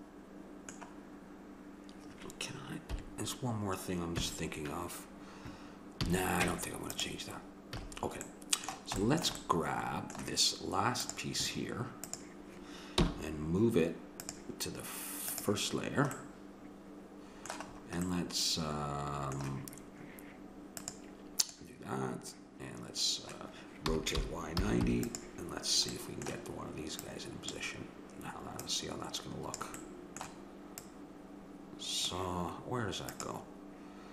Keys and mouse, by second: 2.9 KP_7, 4.2 KP_1, 6.0 a, 6.5 Tab, 7.7 a, 11.0-14.0 drag, 13.0 m, 15.3-16.6 drag, 16.6-20.8 middle drag, 20.8-22.7 drag, 23.9 r, 26.0-27.1 middle drag, 27.1-30.4 drag, 30.4 middle click, 30.8-32.7 drag.